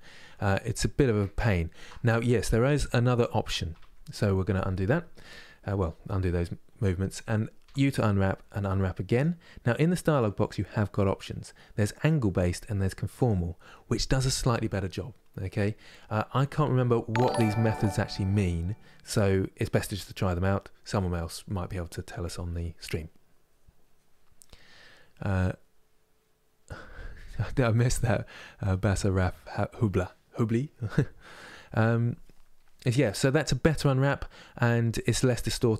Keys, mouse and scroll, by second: 1.0 ctrl+z, 3.4 ctrl+z, 4.6-8.8 scroll down 1, 8.8 u, 12.9-35.7 drag.